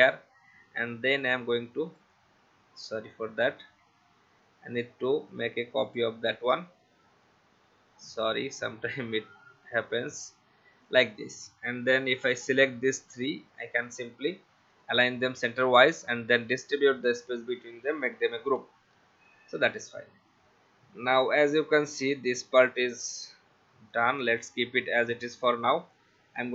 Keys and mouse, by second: 1.1 alt+click, 2.9 alt+click, 6.5 v, 8.0 alt+click, 12.2 shift+click, 13.2 shift+click, 14.7 click, 16.8 click, 18.2 ctrl+g, 19.6 Left, 21.5 Left, 22.2 Right, 23.9 click, 26.1 click.